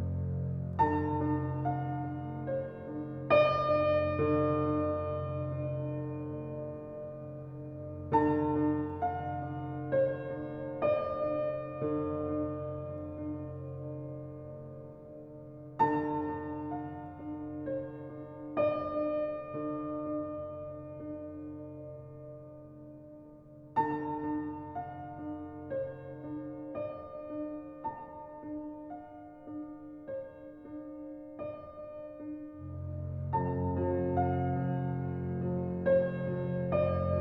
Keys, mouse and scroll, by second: 2.0-3.9 scroll down 1, 13.0-13.6 scroll up 1, 13.6-14.8 scroll down 1, 18.8 scroll up 1, 23.9-24.6 scroll up 1, 24.6 click, 25.1 scroll down 1, 27.8 click, 28.3-29.1 scroll up 1, 29.7 click, 30.1-30.8 scroll down 1, 33.6 scroll up 1, 34.5 scroll up 1, 35.5 click.